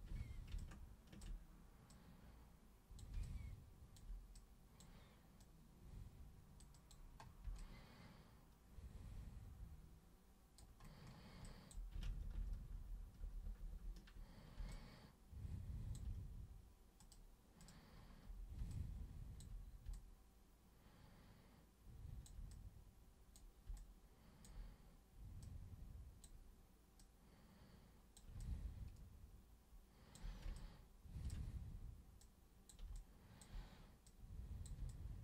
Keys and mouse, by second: 0.6-1.2 ctrl+shift+super+drag, 1.9-3.0 super+drag, 3.3-4.0 alt+super+drag, 4.4-4.8 super+drag, 5.4 super+click, 6.7 super+click, 7.6-10.6 alt+super+drag, 11.5 alt+super+drag, 12.1 ctrl+super+z, 12.3 ctrl+super+z, 12.6 ctrl+super+z, 13.2 ctrl+super+z, 13.4 ctrl+super+z, 13.7 ctrl+super+z, 14.7-16.0 alt+super+drag, 17.0 super+click, 17.6 super+click, 18.7-19.4 alt+super+drag, 19.9-22.3 alt+super+drag, 22.5 super+click, 23.8 alt+super+click, 25.4 super+click, 27.0-28.2 super+drag, 28.4-30.1 alt+super+drag, 30.6-31.3 ctrl+shift+super+drag, 32.2-32.7 super+drag, 33.0-33.4 alt+super+drag, 34.1 super+click, 34.9-35.2 alt+super+drag.